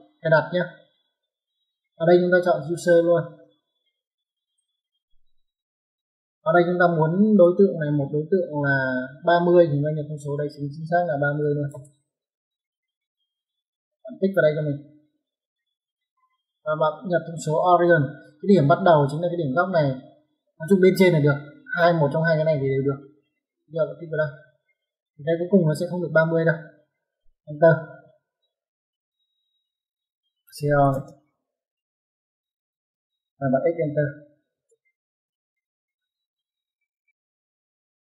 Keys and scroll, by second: 11.4 KP_3, 11.6 KP_0, 27.9-28.8 typing, 30.4-30.8 typing, 32.6 space, 34.4-35.0 typing, 37.2 Escape.